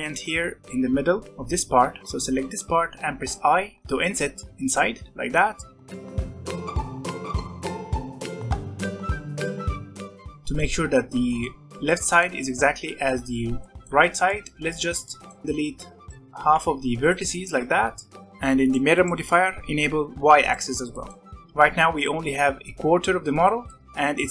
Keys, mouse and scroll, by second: 0.7 scroll up 1, 2.0 i, 6.4-7.8 drag, 7.8-8.4 scroll down 2, 8.4 alt+a, 8.5 Tab, 8.7 middle click, 9.3 click, 9.4 middle click, 9.5 Tab, 9.6 middle click, 10.2 Tab, 10.4-13.9 middle drag, 13.9 Tab, 14.2 middle click, 15.4 middle click, 15.4 b, 16.1 middle click, 16.3 x, 17.5 Tab, 18.5 click, 18.9 click, 20.4 click, 20.9 middle click, 21.2 Tab, 21.2 middle click, 21.4 Tab, 21.5 Tab, 21.7-23.8 middle drag, 23.8 Tab, 23.9 Tab.